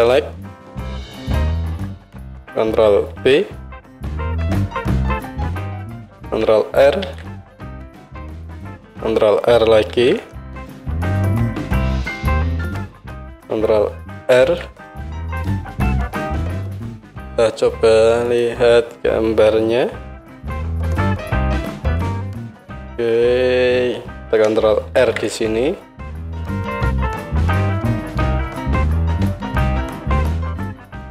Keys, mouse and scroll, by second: 1.8 KP_1, 3.2 ctrl+b, 5.5-11.9 right drag, 7.0 ctrl+r, 9.9 ctrl+r, 11.9-16.1 middle drag, 14.3 ctrl+r, 16.1-17.5 right drag, 19.2-22.9 right drag, 19.8 KP_1, 21.5 click, 21.5 middle click, 22.4 click, 22.4 middle click, 24.9 ctrl+r, 28.2-29.5 drag, 29.6-31.1 right drag.